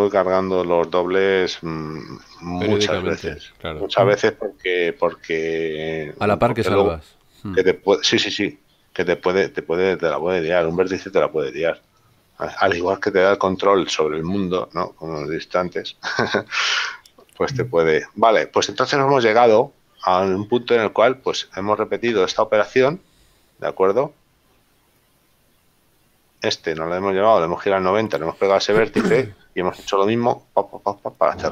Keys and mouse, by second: 10.8 click, 13.2 shift+middle click, 17.3 Tab, 19.5 middle click, 24.9 middle click.